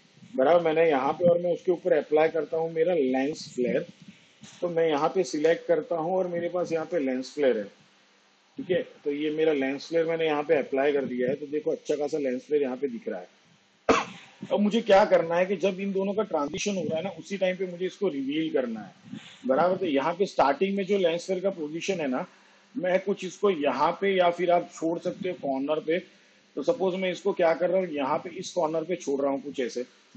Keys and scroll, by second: 4.4 l, 4.9 e, 5.3 n, 5.7 s.